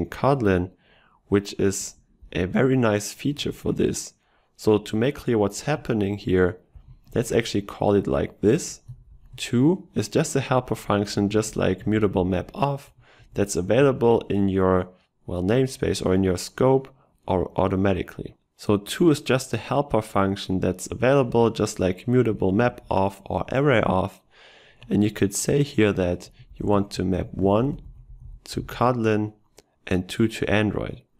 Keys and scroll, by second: 11.9 ctrl+shift+Left.